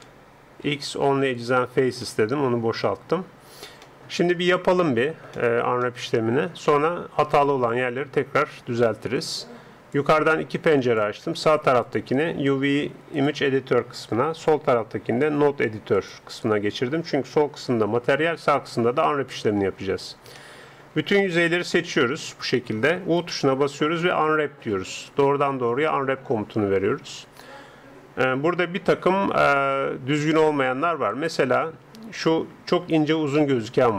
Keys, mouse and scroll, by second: 0.7 x, 2.1-7.5 middle drag, 7.7-9.6 drag, 10.0-16.3 drag, 17.7 n, 19.7-21.5 middle drag, 21.5 a, 21.7 a, 22.1 a, 23.3 u, 26.4-33.9 drag.